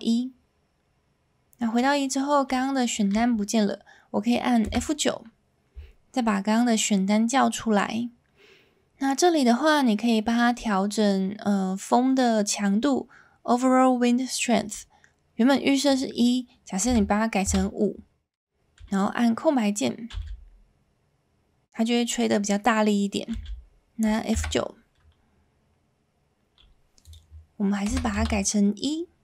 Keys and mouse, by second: 4.6 F9, 20.1 space, 23.3 space, 24.3 F9.